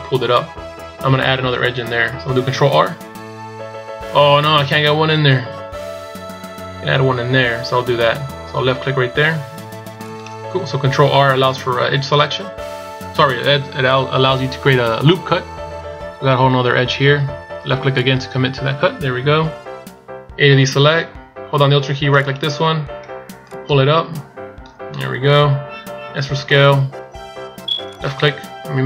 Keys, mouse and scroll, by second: 22.3 alt+right click, 23.6 click, 26.0 s.